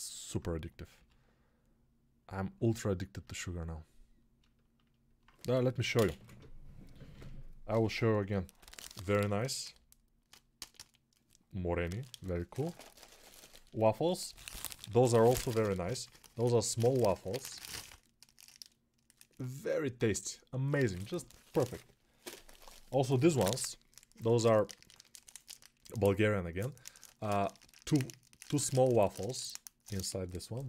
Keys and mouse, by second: 0.9 g, 3.1-30.6 ctrl+alt+drag.